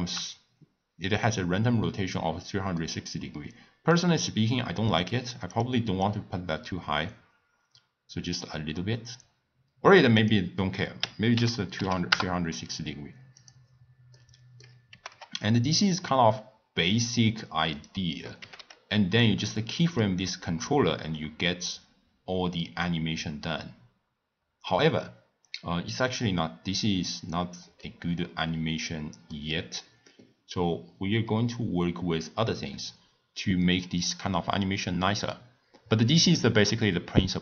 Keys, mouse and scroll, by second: 5.0 click, 6.0-9.0 drag, 10.1-13.2 drag, 13.4 click, 14.1-14.9 middle drag, 14.9 g, 18.4 g, 27.8-30.8 middle drag.